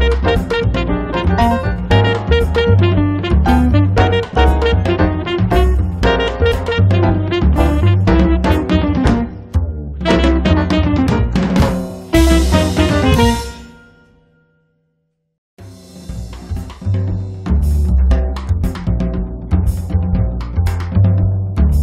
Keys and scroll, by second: 0.0-1.2 typing, 2.3 e, 6.1 space, 7.2 f, 9.1 1, 9.4 Return, 10.3 l, 13.2 Escape, 15.5 space.